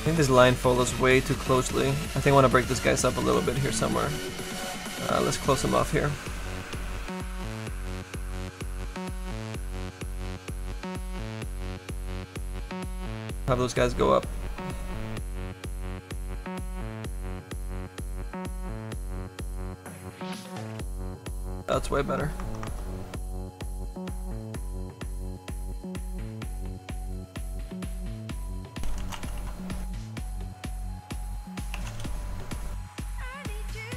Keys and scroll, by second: 6.7 s, 7.1 s, 28.1-31.2 typing, 31.8 Return.